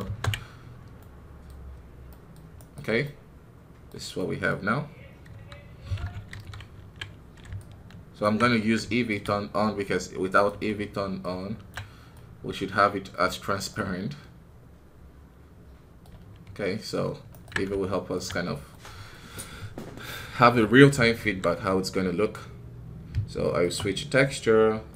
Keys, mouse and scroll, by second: 0.0 ctrl+space, 0.9-2.5 middle drag, 2.5 right click, 2.9-4.7 middle drag, 4.7-5.2 scroll up 1, 5.2 KP_1, 6.2 ctrl+KP_1, 7.5-9.1 ctrl+alt+drag, 9.1 z, 10.3 right click, 11.6 ctrl+Tab, 12.0-18.1 middle drag, 18.1 z, 18.6 middle click, 19.1-19.6 scroll up 2, 19.7 middle click, 20.3 KP_3, 21.1 ctrl+KP_1, 21.8-23.6 scroll down 1, 23.6 space.